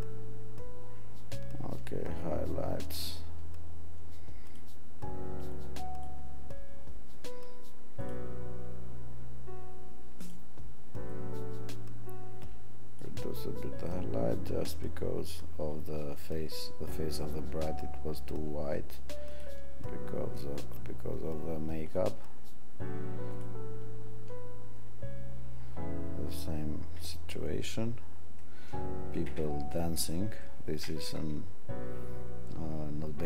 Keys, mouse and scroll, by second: 26.3 click.